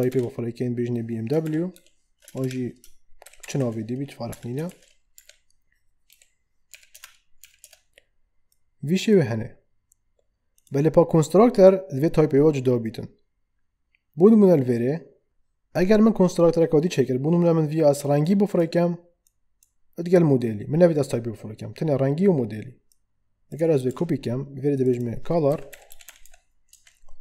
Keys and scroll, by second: 0.1 shift+', 1.4-4.7 typing, 5.2 Right, 6.1 ,, 23.9 ctrl+d, 25.2-26.7 typing.